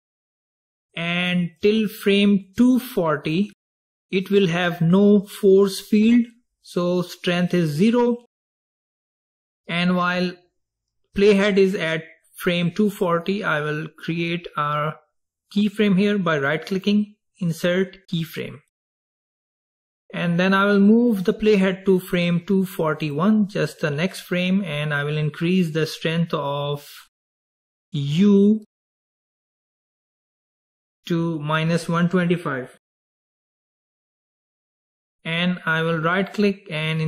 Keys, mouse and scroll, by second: 1.7-4.9 drag, 16.8 right click, 23.2-26.3 drag, 31.0-34.1 drag, 36.4 right click.